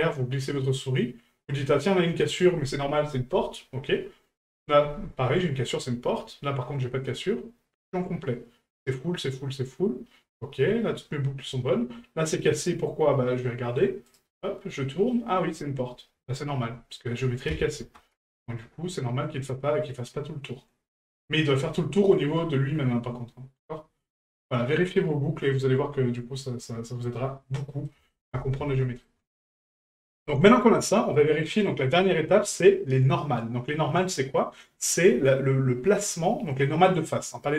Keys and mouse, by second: 14.3-15.1 middle drag, 27.6 middle drag, 28.1 shift+middle drag, 28.7-29.0 middle drag.